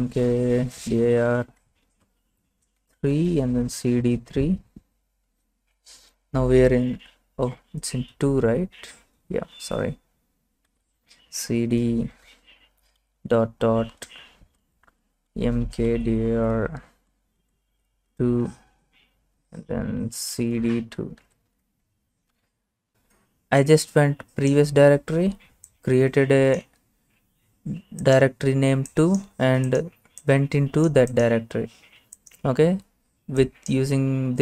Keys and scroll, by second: 0.0-4.8 typing, 5.3 Return, 10.4-11.2 typing, 13.0 typing, 14.5-17.7 typing, 19.2-21.2 typing, 21.5 Return.